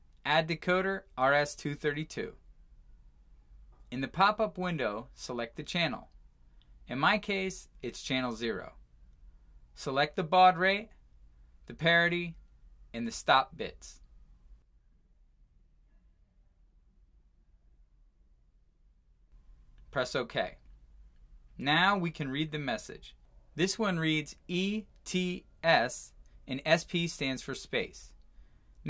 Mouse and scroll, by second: 1.8 click, 4.6 click, 7.4 click, 20.6 click, 20.7 click, 20.9 click, 23.7-24.3 scroll.